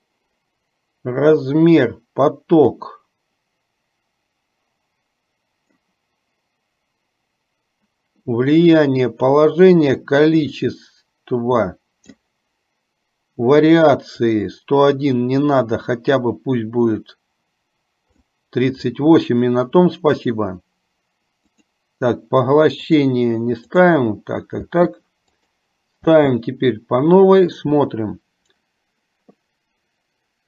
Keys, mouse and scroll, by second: 3.0-6.0 drag, 10.8-12.5 drag, 14.5-18.4 drag, 21.9 click, 23.9 click, 24.9 space, 25.8 click.